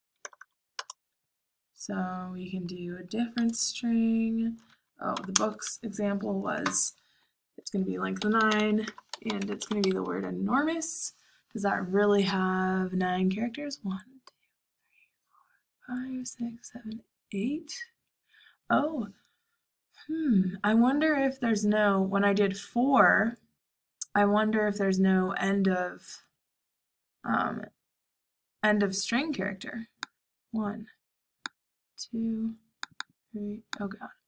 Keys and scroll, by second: 0.0-0.3 typing, 0.7 Return, 5.0 typing, 7.9-10.2 typing.